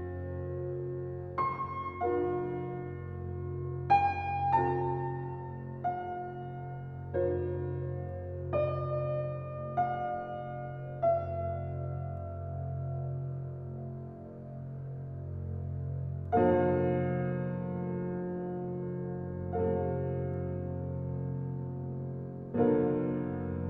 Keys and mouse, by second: 2.5 click, 3.8 Tab, 4.3-6.8 ctrl+alt+drag, 6.8 ctrl+alt+click, 9.2-11.9 ctrl+drag, 9.5 ctrl+s, 12.1 alt+click, 13.8-14.4 alt+shift+drag, 14.6-14.9 ctrl+alt+shift+drag, 15.2-18.2 alt+shift+drag, 17.8 alt+a, 18.2 ctrl+s, 18.8-19.6 alt+drag, 21.5 click, 23.0-23.6 alt+drag.